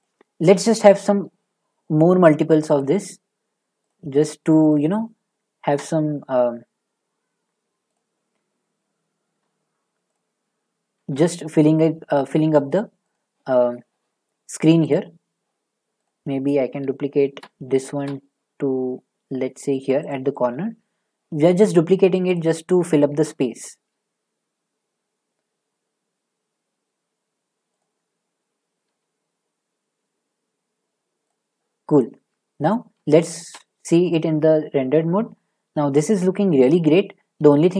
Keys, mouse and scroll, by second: 0.0 click, 1.1 d, 2.8 click, 3.9 click, 4.5 click, 5.6 d, 7.9 click, 10.1 click, 11.0 d, 13.2 click, 14.9 click, 16.0 click, 16.8 f, 17.8 shift+d, 20.1 click, 22.3 click, 23.1 d, 27.8 click, 28.8 s, 31.3 click, 32.0 click, 33.0 z, 33.4 z, 37.4-37.7 z.